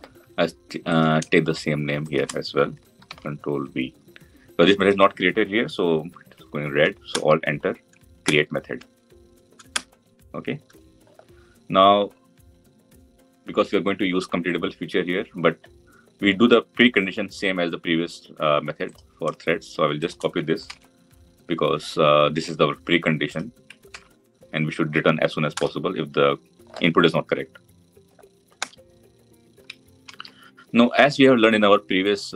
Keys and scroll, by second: 2.9 ctrl+v, 20.5 ctrl+c, 25.1 ctrl+v.